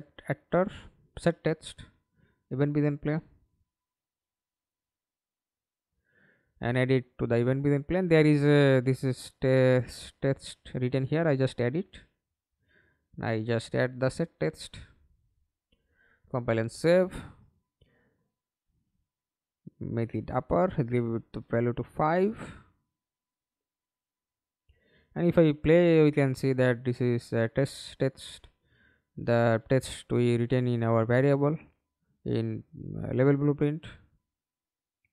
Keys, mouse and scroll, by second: 0.0 Up, 0.2 Return, 1.3 right click, 1.7-3.9 typing, 7.5 Return, 20.6 5, 21.0 Return, 23.7 alt+p, 25.0-25.6 w, 25.7 a, 28.0 Escape, 32.7 middle click, 33.6 ctrl+space.